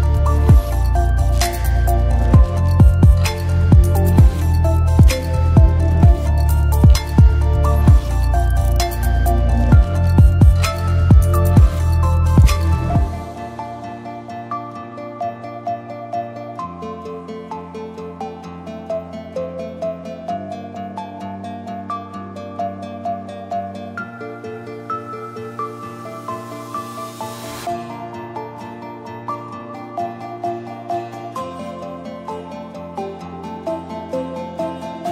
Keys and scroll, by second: 15.3-16.4 typing, 22.6-23.4 typing, 33.3 space, 34.0 ctrl+z, 34.5 space.